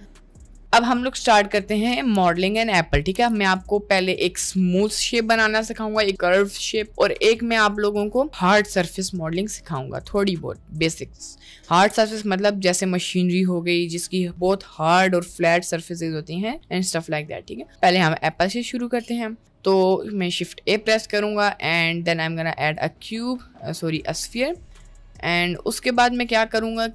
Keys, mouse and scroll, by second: 0.3 click, 3.1 a, 3.3 x, 17.4 middle click, 18.2 middle click, 19.0 shift+a, 24.4 click.